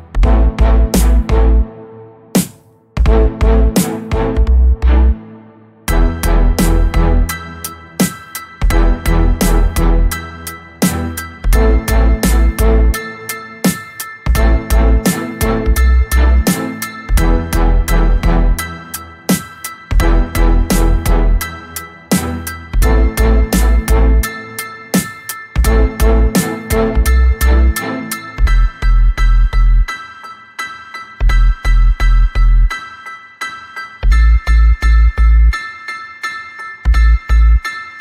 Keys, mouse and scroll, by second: 0.5-0.9 scroll up 2, 1.1 space, 2.6 ctrl+d, 3.3-5.6 ctrl+drag, 7.0-9.1 drag, 9.9-11.8 shift+drag, 12.5 space, 13.4 ctrl+d, 14.3-16.3 drag, 17.3 click, 17.7 click, 18.7 click, 19.2 space, 19.8-20.9 ctrl+scroll up 6, 22.3 click, 23.8-25.6 drag, 27.0 shift+click, 27.6 shift+click, 30.1 click, 31.1 ctrl+d, 31.4-33.1 ctrl+drag, 33.3 ctrl+click, 34.7-37.7 drag.